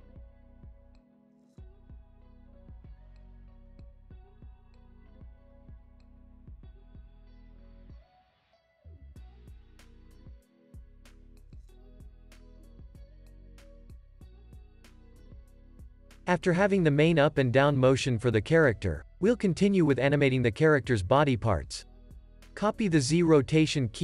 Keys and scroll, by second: 0.4 space, 2.9 space, 3.1 super+s, 3.8 space, 12.8 space, 13.1 super+s, 15.6 space, 15.8 super+s, 23.4 super+c.